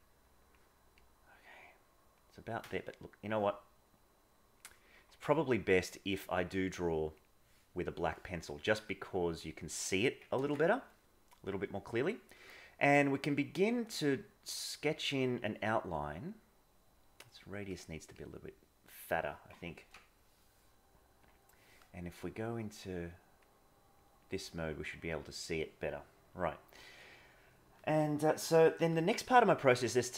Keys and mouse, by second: 6.0-7.3 drag, 8.9-9.4 drag, 10.3 ctrl+z, 13.5 click, 14.0-14.8 drag, 16.2-17.6 drag, 18.2 click, 19.8 ctrl+z, 21.2 click, 22.5 click, 24.0 click, 24.5 click, 26.7 middle click, 28.8 KP_1.